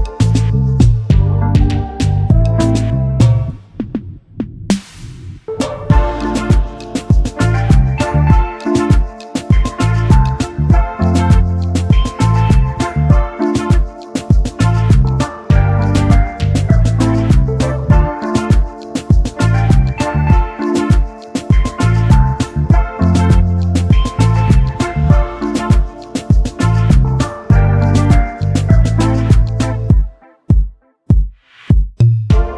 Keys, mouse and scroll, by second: 0.9 ctrl+z, 1.4-1.9 alt+scroll down 1, 2.1 space, 2.2 double click, 6.3 Delete, 7.6 double click, 8.0 alt+scroll down 1, 9.0 alt+click, 9.1 space, 9.2 double click, 9.8 space, 9.9 double click, 13.9-15.2 scroll down 1, 15.2 scroll up 1, 15.5 scroll down 1, 20.5 typing, 21.6 typing, 24.8 double click, 25.8 ctrl+f, 27.1 double click, 28.2 alt+scroll up 1, 30.3 double click, 30.7 alt+scroll down 1, 31.4 double click.